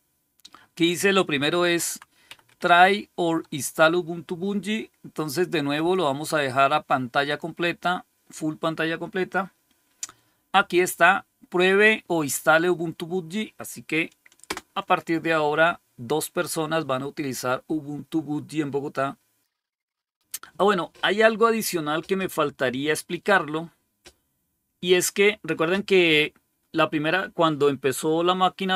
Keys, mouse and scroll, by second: 1.5 Down, 1.7 Down, 2.1 Up, 2.3 Up, 5.6 click, 7.1 click, 14.3 Return.